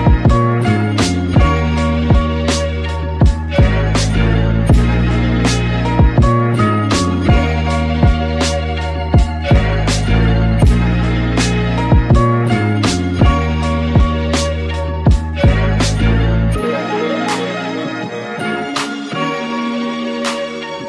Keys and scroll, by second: 17.4 alt+Right, 19.3 super+z.